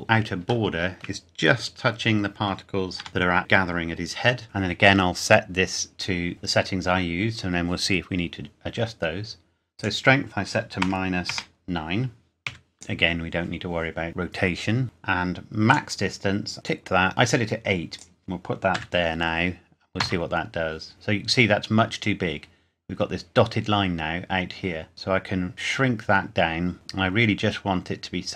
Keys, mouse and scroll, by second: 0.7 shift+middle click, 1.7 scroll up 1, 2.9 g, 3.1 click, 9.8 click, 10.8 KP_Subtract, 11.2 BackSpace, 11.3 KP_Subtract, 12.5 KP_9, 12.7 click, 15.7 click, 17.9 click, 18.7 KP_8, 20.0 KP_Enter, 20.9-21.4 scroll down 1, 24.9 click.